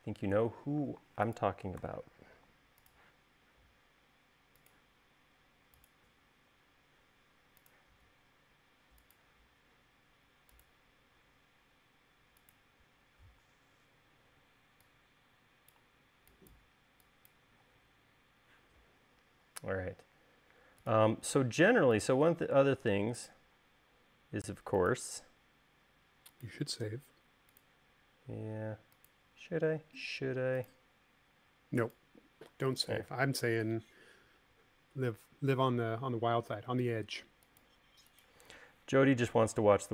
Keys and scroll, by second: 14.6 e, 18.0 l.